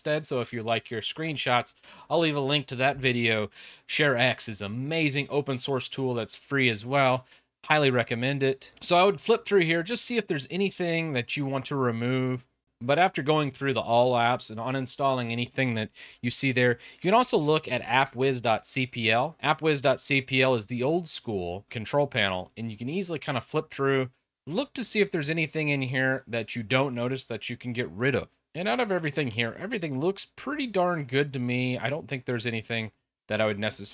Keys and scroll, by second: 12.9 super+r, 16.4-20.0 typing.